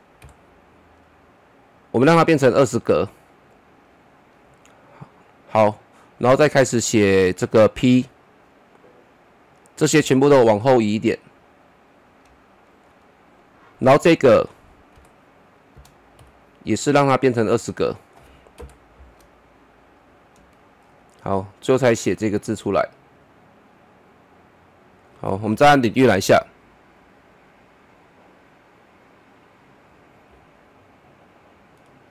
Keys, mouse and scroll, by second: 0.2 typing, 2.0-5.4 drag, 5.4 click, 7.6-13.3 drag, 13.3 click, 16.2 typing, 17.4 click, 18.6 shift+Page_Down, 19.8-21.4 drag, 21.4-23.4 drag, 23.4-26.2 drag, 26.2 KP_0, 31.0-32.1 drag.